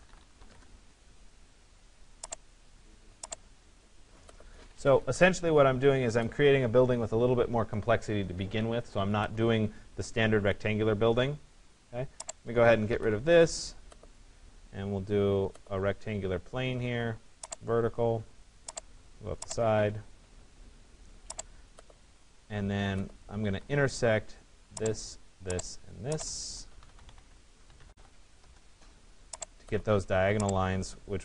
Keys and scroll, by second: 0.2 Return, 4.3 Escape, 12.6 Delete, 23.0 Escape, 27.9 e.